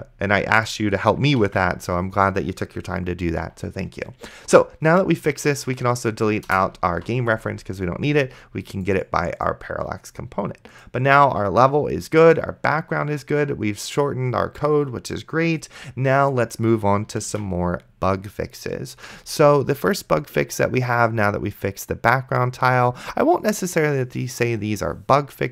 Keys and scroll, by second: 1.7 ctrl+s, 7.2 ctrl+s, 17.5 ctrl+w.